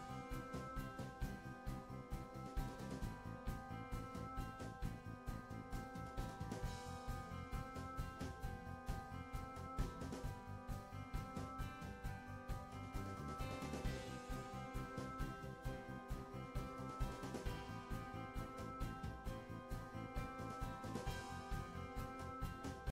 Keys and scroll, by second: 1.4 Left, 12.7 Return.